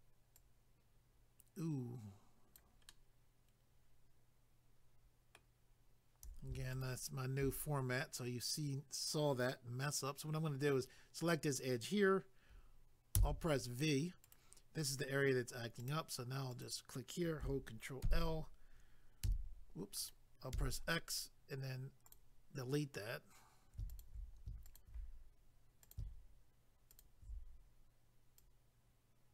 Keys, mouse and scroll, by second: 0.4 click, 2.9 middle click, 6.7 alt+click, 6.8 alt+click, 14.2 right click, 14.3 right click, 15.8 click, 15.9 click, 16.5 click, 16.6 click, 18.0 ctrl+i, 19.3 c, 20.0 right click, 20.1 right click, 22.1 click, 23.9 alt+click, 24.7 alt+click, 25.8 click, 26.9 alt+click, 27.0 alt+click, 28.4 click.